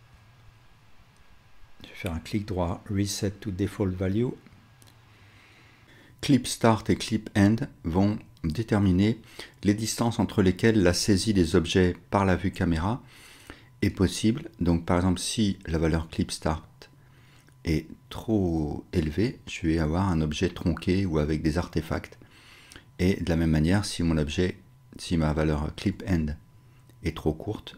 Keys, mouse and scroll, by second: 0.7-5.8 middle drag, 5.8-27.7 drag.